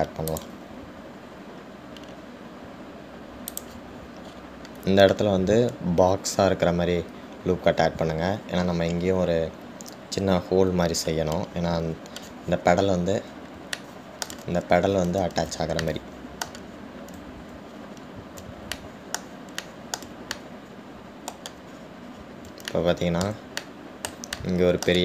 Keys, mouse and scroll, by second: 1.0 ctrl+r, 5.6-8.6 middle drag, 5.6-8.6 scroll up 4, 12.8 middle click, 12.8-14.2 scroll down 3, 14.6-15.1 scroll down 1, 15.1-19.3 shift+middle drag, 18.1-19.0 scroll down 1, 19.0-19.9 scroll up 4, 19.9-23.0 shift+middle drag, 23.0-23.9 scroll down 5, 24.2-25.0 shift+middle drag.